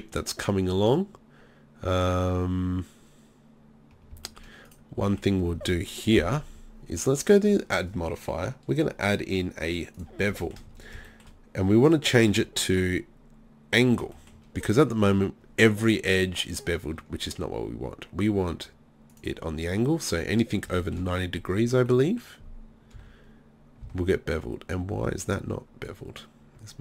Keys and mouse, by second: 6.2 KP_3, 10.4-12.8 middle drag, 14.6-18.2 middle drag, 19.1-20.8 drag, 20.8 middle click, 21.9 middle drag, 23.0 z, 23.8 z.